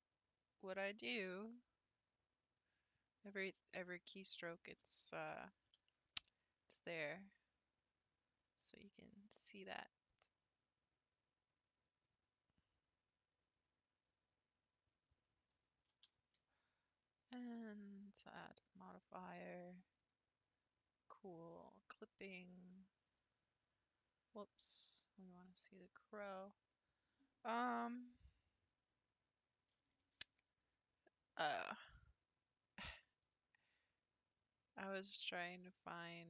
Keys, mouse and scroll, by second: 5.8 ctrl+r, 8.0-11.1 scroll down 3, 12.6 click, 13.5 click, 15.9 x, 17.6 click, 18.6-21.6 drag, 23.4 click, 24.3-25.5 drag, 25.5 scroll up 2, 30.6 click, 33.2-36.2 drag.